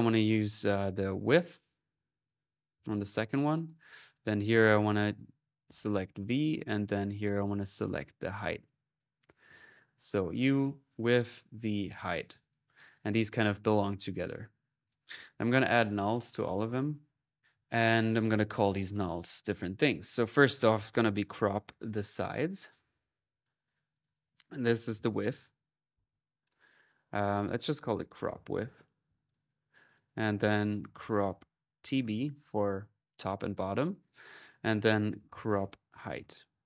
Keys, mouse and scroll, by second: 0.9-2.6 drag, 2.9 click, 3.2 middle click, 3.5 click, 4.4 click, 6.0 click, 7.0 click, 7.7-9.5 drag, 10.9 click, 11.7 middle click, 12.1-13.1 drag, 13.1 right click, 14.0 click, 14.3 middle click, 14.9 click, 15.5-17.6 typing, 15.9 alt+click, 17.0 alt+click, 19.6 click, 22.7 middle click, 23.1-24.3 drag, 27.1 click, 29.6 click, 32.8-34.1 drag, 36.4 click.